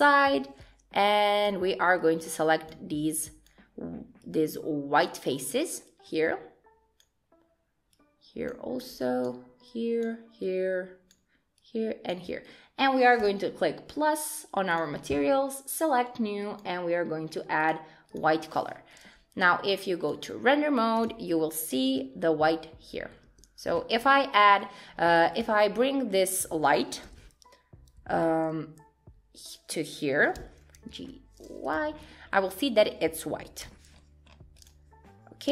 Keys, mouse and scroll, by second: 0.1 click, 2.0 shift+click, 13.2 click, 14.7 click, 15.8 click, 18.1 click, 20.1 click, 20.6-21.0 scroll down 3, 21.0 click, 21.9 Tab, 22.2 middle click, 23.3 Tab, 24.0-25.2 scroll down 5, 24.0 Tab, 25.4 click, 25.8 middle click, 27.0 g, 30.4 g, 32.0-33.4 scroll up 5, 32.3 middle click, 33.6 KP_1, 33.9-34.8 scroll up 5, 34.6 click.